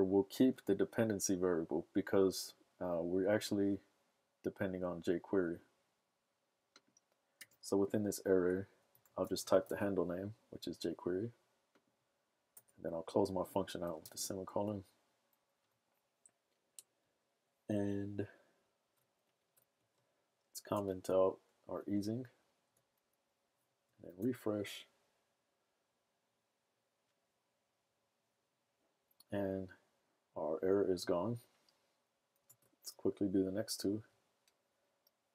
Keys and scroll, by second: 0.5 BackSpace, 8.8-10.1 typing, 14.5 super+s, 15.5 super+Tab, 20.8 super+/, 20.9 super+s, 21.9 super+Tab, 24.2 super+r.